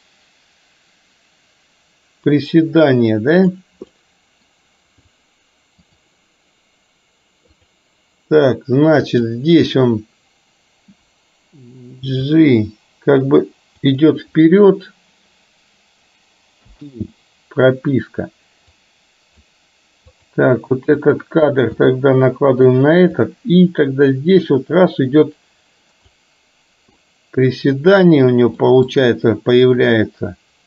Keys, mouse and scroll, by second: 3.9-4.6 middle drag, 5.9 click, 9.1 click, 12.3 g, 16.7 i, 18.9 click, 20.2 click, 21.2 click, 21.8 g, 23.3-26.3 drag, 27.1-28.1 middle drag, 28.7 middle click, 29.9-30.6 drag.